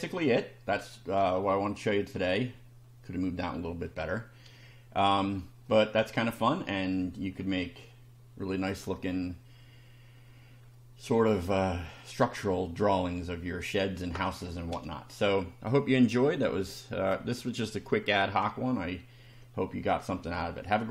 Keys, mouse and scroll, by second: 0.1 middle click, 1.2 shift+middle click, 2.1 shift+scroll up 1, 5.2 shift+middle click, 6.2 scroll down 1, 10.7-11.7 middle drag, 11.8 scroll down 1, 18.8-19.5 shift+middle drag.